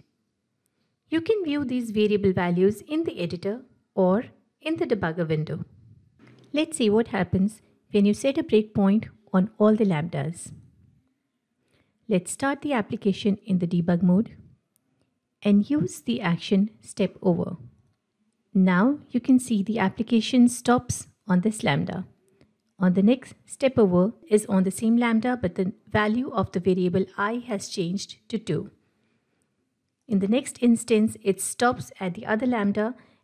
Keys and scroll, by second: 7.4 ctrl+F8, 17.8 F8, 22.7 F8, 30.0 F8.